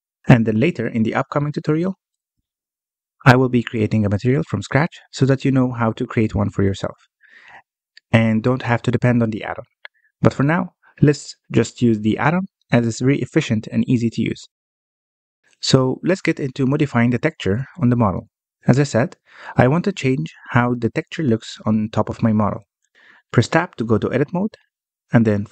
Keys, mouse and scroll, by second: 13.4-14.1 scroll up 1, 14.1-17.7 middle drag, 17.7-18.2 scroll up 1, 18.2-21.2 shift+middle drag, 24.7 Tab.